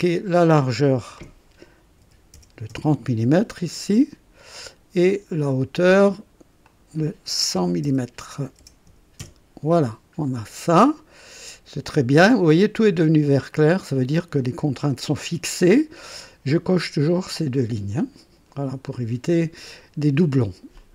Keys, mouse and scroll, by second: 0.6 click, 2.0 KP_3, 2.3 KP_0, 2.7 Return, 5.6 click, 6.6 click, 7.5 KP_1, 8.5 KP_0, 9.2 Return, 10.2 scroll up 1, 10.9 right click, 11.2 typing, 13.5 click, 20.7 click.